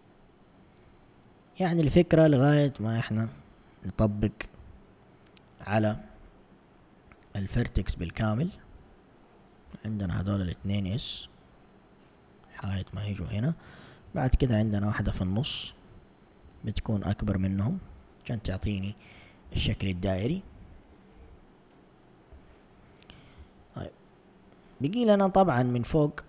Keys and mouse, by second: 1.0 alt+click, 2.4 s, 4.6 z, 8.0 alt+click, 9.1 shift+click, 10.7 alt+s, 16.5 ctrl+s, 18.0 a, 20.5 typing, 21.2 Tab, 22.4 Tab, 23.4 1.